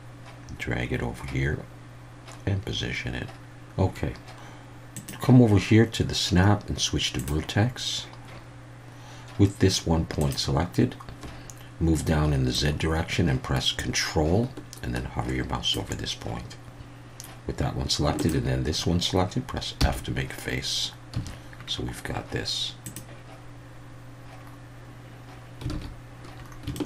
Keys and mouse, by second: 4.9-8.1 drag, 10.2 click, 12.6-15.7 drag, 18.2 shift+click, 19.8 f, 21.1 a, 22.8 click, 25.7 alt+a, 26.7 shift+middle click.